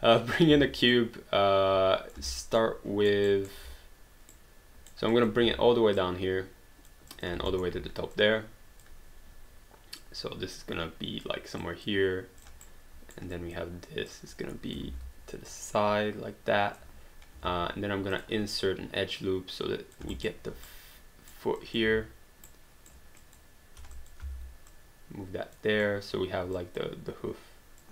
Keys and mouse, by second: 0.5 w, 0.9 click, 2.3 alt+right click, 2.6 alt+middle click, 3.5 alt+right click, 4.5 right click, 5.1 click, 5.4 w, 6.0 click, 7.5 alt+middle click, 8.2 click, 10.0 click, 11.6 click, 12.6 right click, 13.3 click, 14.9 ctrl+z, 15.5 click, 18.1 click, 20.1 alt+right click, 20.8 right click, 21.6 click, 22.2 w, 22.5 right click, 23.2 click, 23.8 q, 23.9 click, 24.2 w, 24.7 click, 27.8 click.